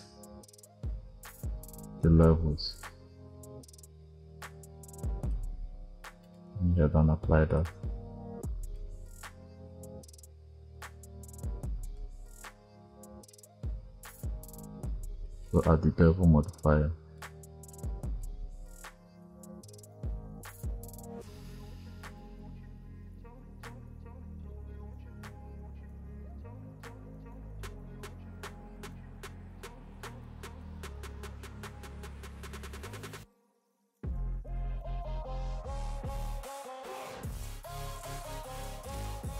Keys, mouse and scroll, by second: 6.1-7.5 drag, 9.4 scroll up 1, 11.7-15.4 drag, 17.0-19.9 drag, 20.0 click, 21.6 click, 22.5 scroll down 3, 23.3-24.4 drag, 25.4 click, 26.1 click, 27.1 click, 28.4 KP_0, 28.8-30.3 drag, 30.4-30.7 drag, 31.0 click, 32.6 click, 34.4 click, 34.7 click, 35.6 click, 37.5 click, 38.4 click.